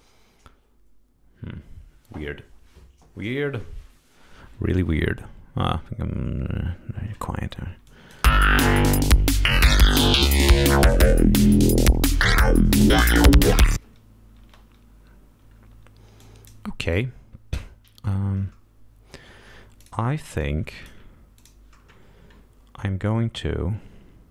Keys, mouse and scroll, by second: 7.8 click, 8.1 space, 10.4 scroll down 2, 11.1 scroll up 2, 12.9 scroll down 2, 13.0 scroll up 2, 14.3 space, 16.1 click, 16.7 right click, 19.7 click, 20.3 click, 21.3 click, 24.2 click.